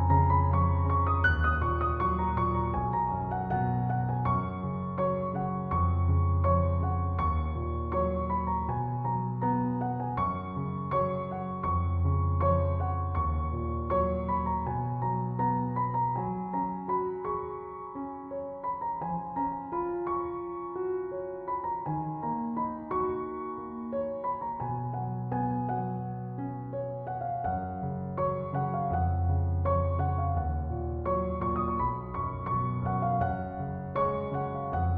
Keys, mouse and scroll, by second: 6.0 Return, 13.8-15.3 typing, 16.0 Return, 19.7 2, 20.3 Return, 29.6 Return.